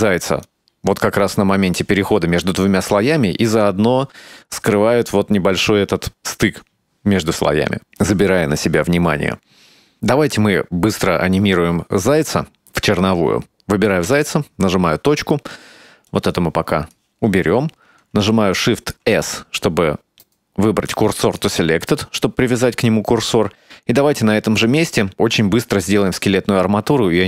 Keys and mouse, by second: 0.6-1.9 drag, 3.7 click, 9.9-10.9 drag, 12.5 right click, 14.1 KP_Decimal, 16.2 click, 19.2 shift+s.